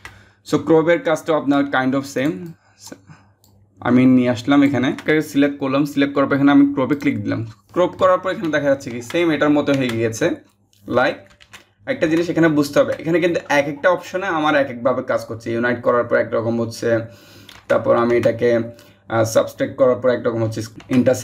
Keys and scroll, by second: 11.0 ctrl+z.